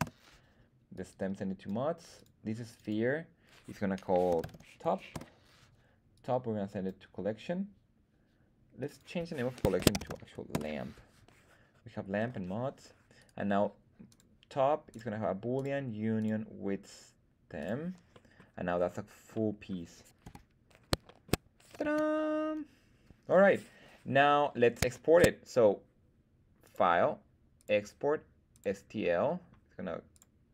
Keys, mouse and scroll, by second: 0.9-1.6 drag, 2.1 click, 2.6 click, 2.8-5.5 drag, 6.1-6.9 drag, 8.7 click, 8.9-11.0 drag, 13.2 right click, 14.0-15.1 drag, 15.5 click, 16.1-17.7 drag, 18.1 middle drag, 18.7-19.1 scroll down 2, 19.3-19.6 middle drag, 20.2 KP_1, 20.7 scroll down 1, 21.0 shift+middle drag, 21.8 z, 24.2-24.8 scroll up 1, 25.0 shift+middle click, 26.6-28.7 drag.